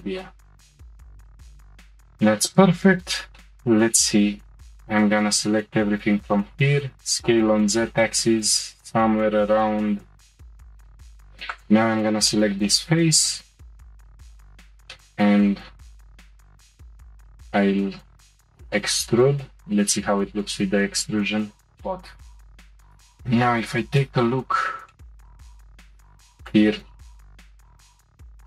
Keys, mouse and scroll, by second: 1.5 Tab, 2.5 click, 3.3-4.4 shift+middle drag, 4.4 a, 6.0 s, 10.9 Tab, 11.5 click, 11.9 Tab, 12.3-14.2 shift+middle drag, 14.3 click, 14.9-17.8 shift+middle drag, 18.5 e, 22.3 middle click, 22.4 middle click, 23.0 click, 23.2-25.5 shift+middle drag, 25.5 click, 25.9 ctrl+r.